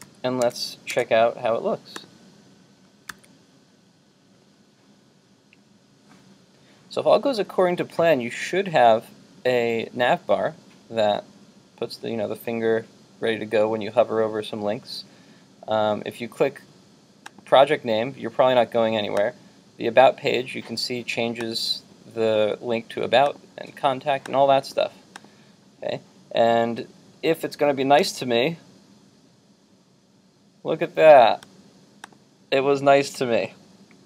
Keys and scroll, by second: 0.1 super+s, 0.6 super+Tab, 3.1 super+r.